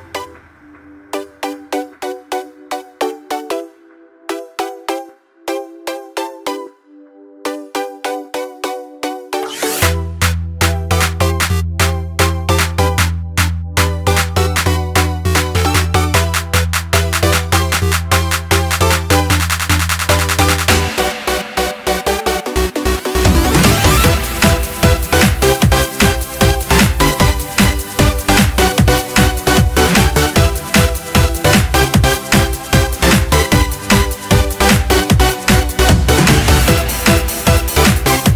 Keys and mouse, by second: 1.7 click, 3.2-5.2 middle drag, 6.2 click, 10.2 click, 13.5 click, 14.4 click, 14.8 middle click, 21.3-23.6 drag, 27.2 click, 28.1 click, 29.2 click, 31.2 click, 32.7 click, 34.5 click.